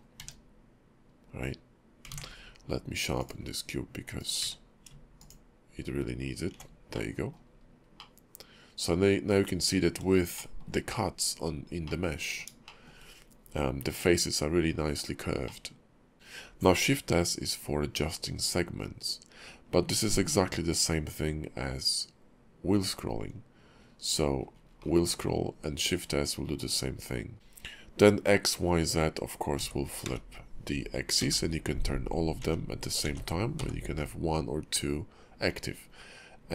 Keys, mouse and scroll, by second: 0.2 q, 1.4 scroll down 2, 2.1 ctrl+`, 4.4 q, 6.9 middle click, 7.5 scroll up 3, 8.0 middle click, 10.4 shift+middle click, 11.8 middle click, 12.6 shift+middle click, 13.3-14.7 scroll up 3, 14.7 scroll down 3, 15.4 middle click.